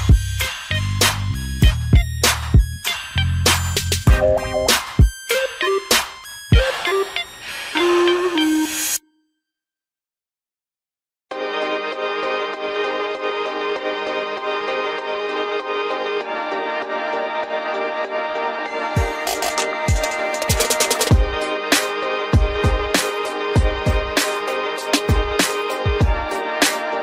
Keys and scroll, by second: 17.2 ctrl+i.